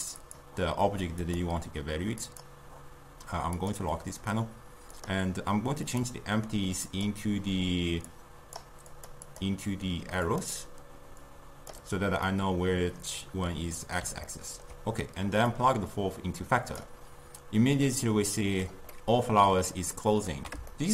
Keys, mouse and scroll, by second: 0.2 click, 1.2 click, 3.6 click, 5.0 click, 5.9-7.0 drag, 8.1-9.1 drag, 9.3-12.3 drag, 12.3-15.5 middle drag, 15.5 drag, 18.0-19.0 drag, 19.0-20.9 middle drag.